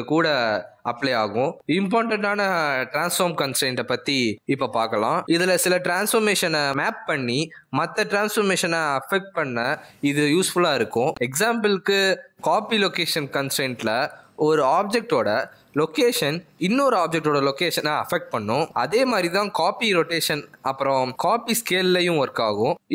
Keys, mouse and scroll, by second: 1.4 click, 2.1 click, 2.7 click, 6.9-7.5 scroll down 6, 7.5-9.3 scroll up 5, 10.2 click, 11.4 g, 15.9 click, 17.9 click, 18.2 r, 19.7 click, 19.7 r, 19.8 s, 20.9 s, 22.2 s.